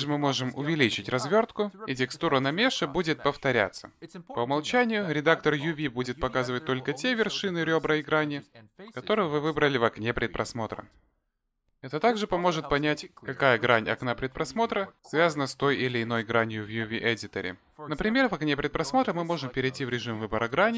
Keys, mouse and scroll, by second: 1.0 ctrl+z, 1.4 ctrl+z, 1.9 a, 2.6 s, 7.6 click, 13.4 click, 14.0 shift+click, 19.2 middle click.